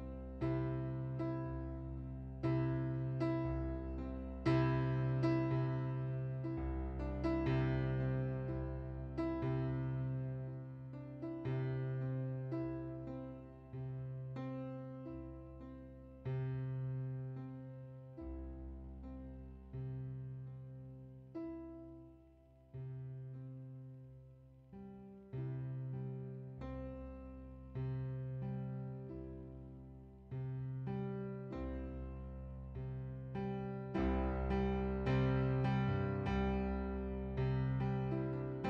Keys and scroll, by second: 6.5 ctrl+z, 9.8 ctrl+z, 10.7 ctrl+d, 15.4 ctrl+d, 26.2 typing, 27.8-28.5 typing, 29.6 typing, 31.6-32.3 typing.